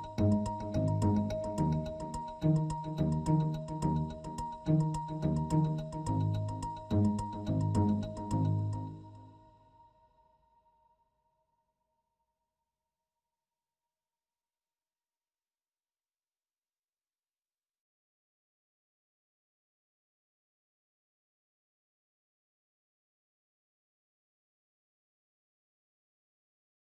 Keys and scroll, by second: 0.9 c.